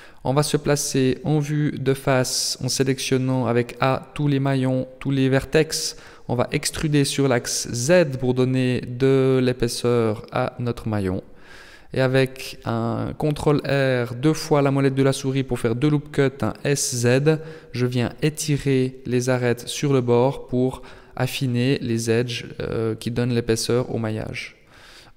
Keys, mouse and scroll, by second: 0.8-1.4 scroll up 4, 1.7 shift+middle click, 2.6 a, 3.2 a, 4.0 e, 9.8 ctrl+r, 14.8 s, 18.9 middle click, 20.0 Tab, 21.0 t, 23.6 click, 24.7 middle click.